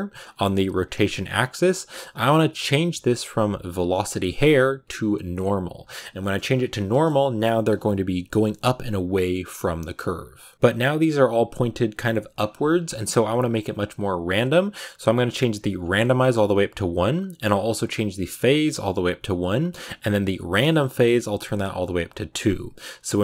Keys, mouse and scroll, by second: 0.1-5.4 drag, 6.1-12.4 shift+middle drag, 6.2-10.5 scroll up 7, 10.5-11.3 scroll down 8, 11.3-12.2 scroll down 1, 12.2 scroll up 7, 15.8-23.0 drag, 23.0-23.2 scroll down 5.